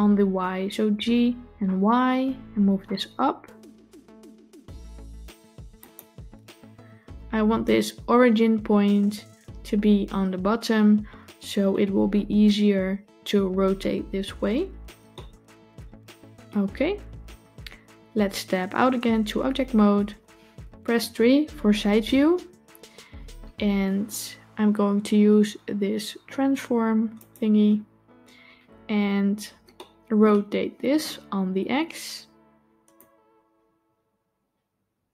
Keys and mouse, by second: 0.7 g, 15.0-16.3 shift+middle drag, 19.7 Tab, 21.5 KP_3, 27.0 click, 29.6-30.1 shift+middle drag, 32.8 click.